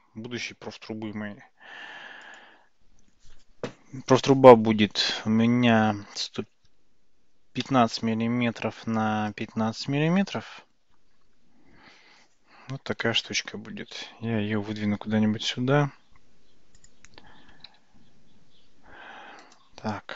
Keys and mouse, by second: 2.4-8.9 drag, 9.4-11.6 drag, 14.3 g, 18.9 f, 19.6-20.1 drag.